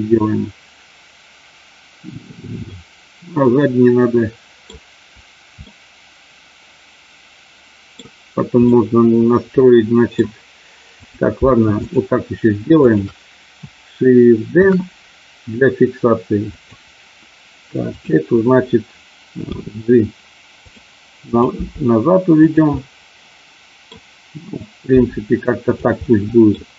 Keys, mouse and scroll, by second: 2.7-4.7 middle drag, 5.7-7.9 middle drag, 8.7-10.2 middle drag, 11.0 click, 11.7 shift+click, 12.7 shift+click, 14.6 shift+d, 16.6 click, 17.9 click, 19.6 g, 21.3 click, 21.7 g, 22.8-23.9 middle drag, 24.9 g, 25.8 click, 26.1 middle click.